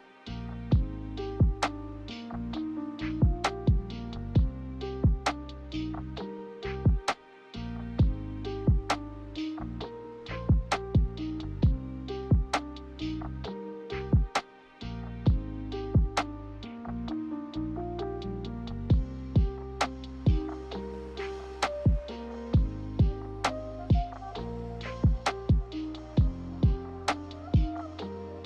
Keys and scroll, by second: 0.6 b, 1.4 Delete, 2.4 g, 7.9 z, 13.4 z, 15.9 ctrl+z, 16.3 ctrl+z, 21.2 ctrl+c, 21.5 ctrl+v, 27.1 g.